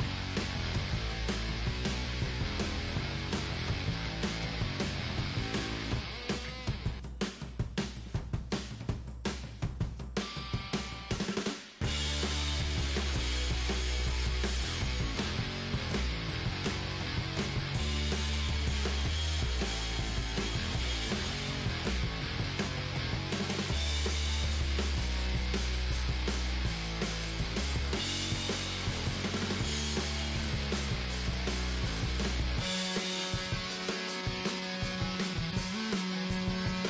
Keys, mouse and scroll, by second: 2.4-6.9 middle drag, 3.0 g, 4.4-6.2 drag, 5.3 g, 8.0-10.1 right drag, 8.8-11.2 middle drag, 9.2 g, 11.5 middle click, 11.9-13.1 drag, 12.5 g, 13.1 right click, 13.6 middle click, 14.2-17.9 right drag, 16.0-20.1 middle drag, 16.6 g, 18.8-21.2 right drag, 19.0 g, 20.1 g, 20.2 middle click, 21.2-22.8 middle drag, 22.1 g, 23.8-25.5 drag, 24.6 g, 26.1 g, 28.0 g, 29.0 middle click, 29.3-33.8 right drag, 29.8 g, 31.6 g, 32.8 g, 33.8-35.0 middle drag, 35.4-36.8 drag, 36.4 g.